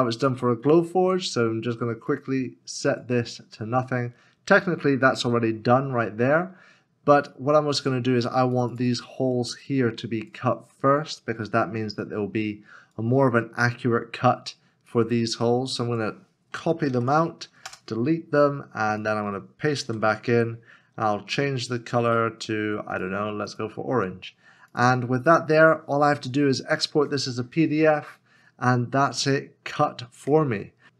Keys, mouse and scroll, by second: 11.2 shift+click, 12.9 shift+click, 14.9 shift+l, 16.9 ctrl+c, 17.7 BackSpace, 19.9 ctrl+f.